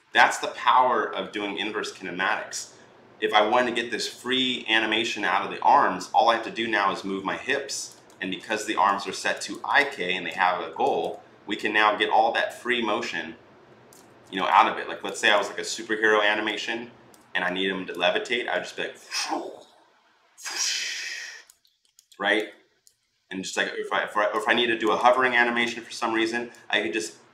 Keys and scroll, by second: 8.0 ctrl+z, 13.9 ctrl+z.